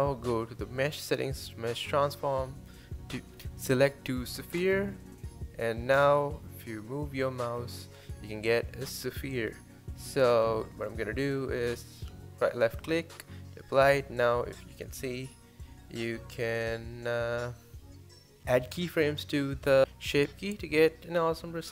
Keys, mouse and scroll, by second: 8.8-9.2 scroll up 1, 9.2 shift+middle click, 9.8 Tab, 10.9-12.1 drag, 12.1-13.1 right drag, 13.1 drag, 14.0 click, 14.9 middle click, 17.7-21.0 middle drag.